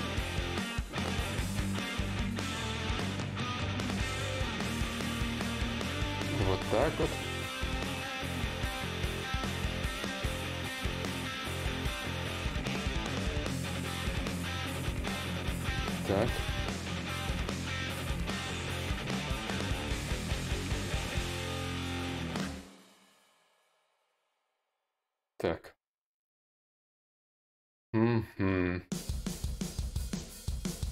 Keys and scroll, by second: 9.0 ctrl+z, 21.5 ctrl+z.